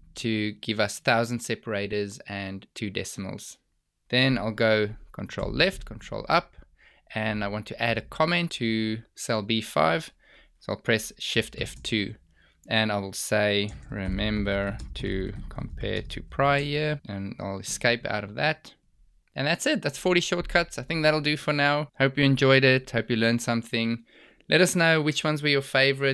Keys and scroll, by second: 5.3 ctrl+Left, 6.1 ctrl+Up, 11.7 shift+F2, 17.8 Escape.